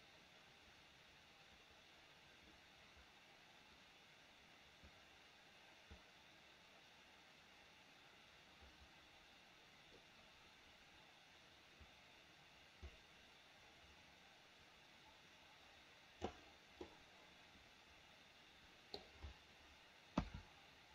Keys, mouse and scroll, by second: 16.9-19.0 middle drag, 20.2 KP_1.